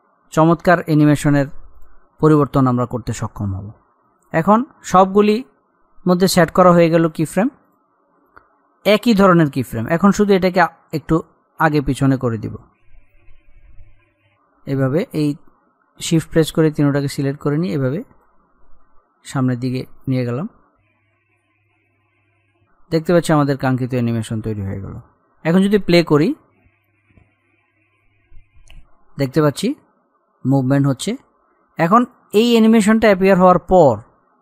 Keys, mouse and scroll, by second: 4.4 click, 5.0-5.3 scroll up 1, 7.3 click, 10.5-13.3 drag, 13.3-13.7 scroll up 1, 16.0-16.4 shift+scroll up 2, 16.7-18.7 shift+drag, 18.7-19.2 scroll down 1, 19.9-27.5 drag, 31.2-34.4 drag.